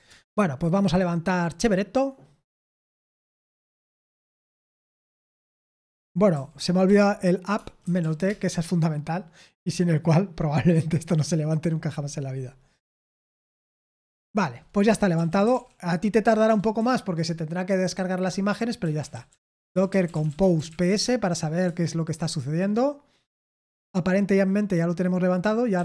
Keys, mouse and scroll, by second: 0.0 Return, 3.7 Return, 4.8 ctrl+p, 6.3-8.4 typing, 13.6 Return, 14.8-16.7 typing, 18.5-21.1 typing, 21.6 Return, 25.5-25.8 typing.